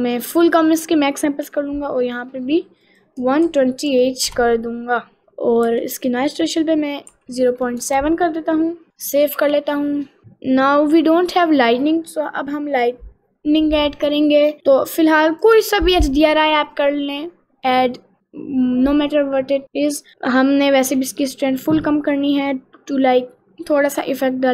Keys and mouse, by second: 2.9-4.4 drag, 5.2-7.9 drag, 9.5 ctrl+s, 10.0 middle click, 11.5 click, 15.4-17.0 drag, 17.7 click.